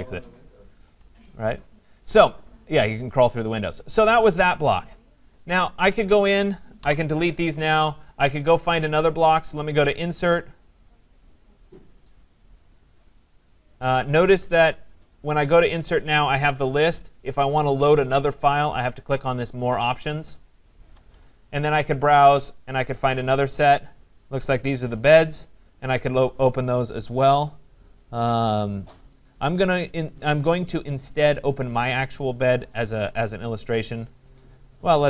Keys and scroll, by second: 6.8 Delete.